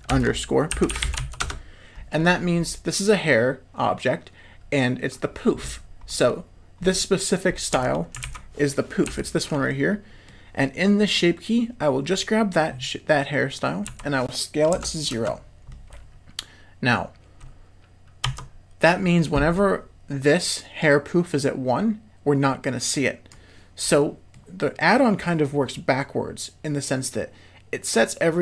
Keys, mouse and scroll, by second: 1.0 o, 6.1 middle click, 6.8 middle click, 7.7 Tab, 8.2 alt+a, 9.0 l, 9.7 middle click, 13.9 s, 15.7-16.8 middle drag, 18.2 Tab, 20.8-23.4 drag, 24.0 middle click.